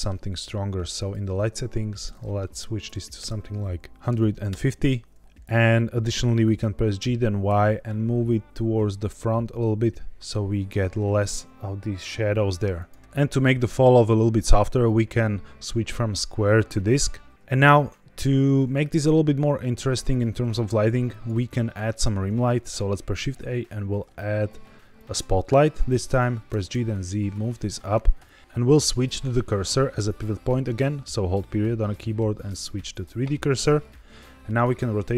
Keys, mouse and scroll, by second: 0.9 click, 1.9-4.4 drag, 6.9 g, 7.4 y, 12.7 click, 14.7-16.5 drag, 18.8 g, 18.8 z, 21.0 click, 23.0 shift+a, 26.4 g, 26.6 z, 28.2 click, 33.8-34.6 middle drag, 34.6-35.1 scroll down 4.